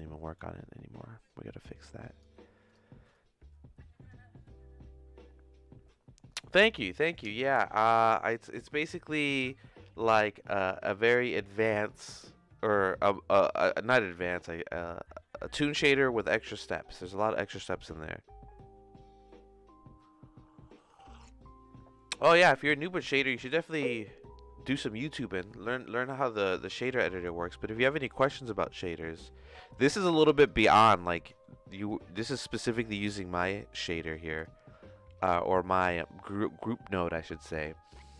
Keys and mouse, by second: 30.3 click, 31.1 middle click, 31.8-34.5 drag, 35.4-37.5 drag.